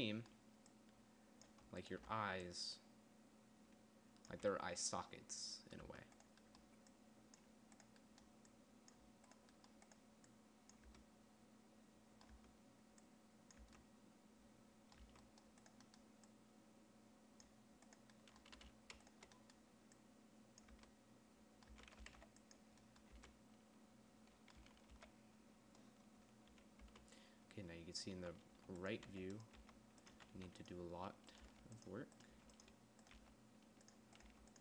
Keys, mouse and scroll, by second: 4.7 Tab, 6.3 Tab, 11.3 Tab, 12.7 Tab, 14.0 Tab, 15.5 Tab, 20.4 middle click, 21.2 Tab, 22.1 Tab, 22.4 g, 23.6 Tab, 25.0 a, 25.3 a, 27.2 Tab, 28.7-30.8 typing, 31.9 g, 32.7 g, 33.5 g.